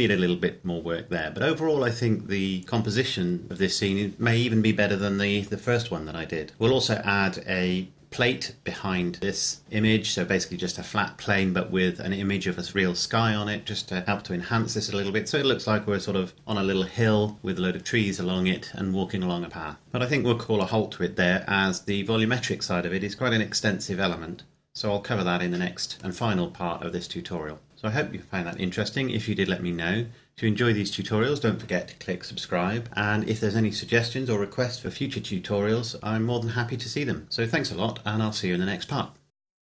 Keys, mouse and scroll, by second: 0.3-1.2 scroll up 1, 1.2-2.5 scroll down 1.